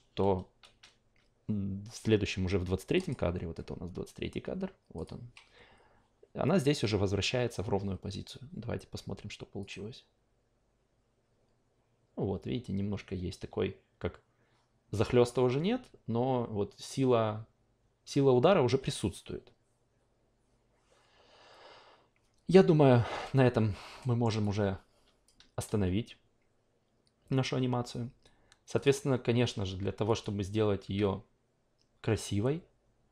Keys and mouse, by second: 2.9 click, 4.9 click, 9.7 click, 24.0 alt+middle drag, 24.4 alt+click, 28.7 click, 30.0 click.